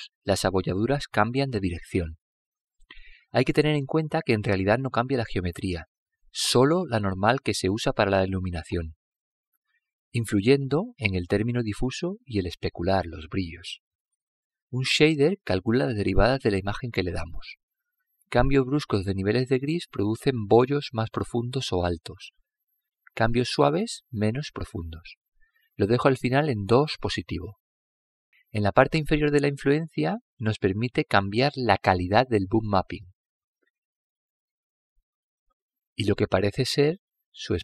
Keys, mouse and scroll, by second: 3.7-5.6 middle drag, 10.2 click, 20.1-21.9 middle drag, 26.6 click, 31.3-34.6 drag, 34.9 click.